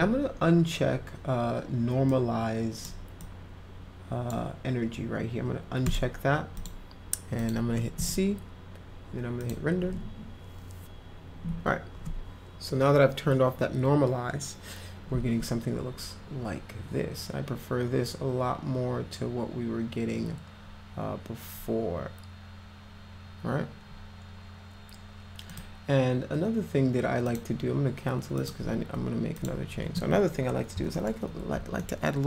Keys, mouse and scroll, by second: 2.1-2.9 drag, 3.2-4.3 drag, 5.9 click, 6.6 click, 7.4 click, 9.4 click, 25.5 click, 27.3 click, 28.4 click, 29.4 click, 30.8 p, 31.0 middle click, 31.8-32.2 alt+middle drag.